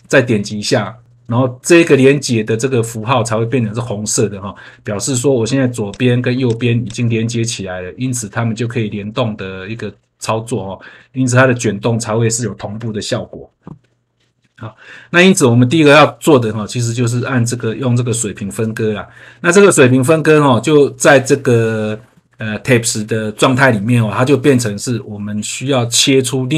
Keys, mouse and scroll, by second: 5.8 click, 6.4 click, 6.8 click, 7.3 scroll down 1, 7.9 scroll up 1, 8.6 scroll down 1, 9.0 scroll up 1, 9.9 scroll down 1, 10.8 scroll up 1, 14.4 scroll down 1, 15.2 scroll up 1.